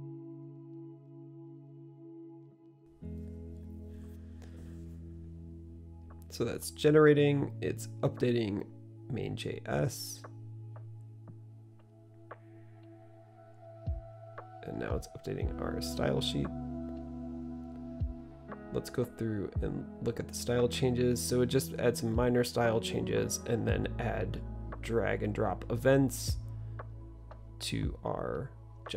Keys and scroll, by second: 0.0-2.9 typing.